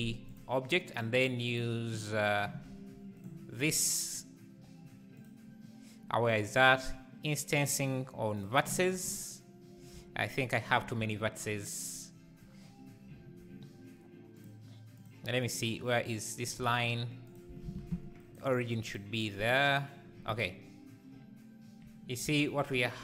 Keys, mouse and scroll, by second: 0.4 ctrl+p, 1.0 click, 1.6 click, 2.7 g, 8.4 click, 9.9 Tab, 12.5 scroll up 2, 13.4 z, 14.5 click, 15.0 click, 15.5 click, 16.6 Tab, 17.3 click, 17.8 shift+s, 17.9 Tab, 19.5-22.4 right drag, 22.4 z.